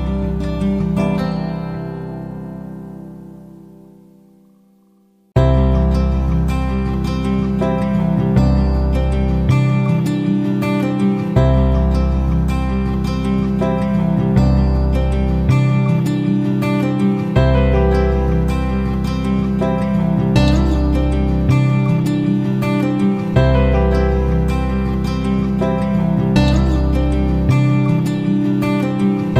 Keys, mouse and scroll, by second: 1.2 click, 3.8 shift+click, 8.2 ctrl+g, 11.1 Left, 11.2 Left, 17.6 click, 19.6 Down, 19.7 Down, 19.8 Down, 21.9 Up, 22.1 Up, 23.3 shift+click, 24.1 ctrl+g, 26.4 click, 29.1 F9.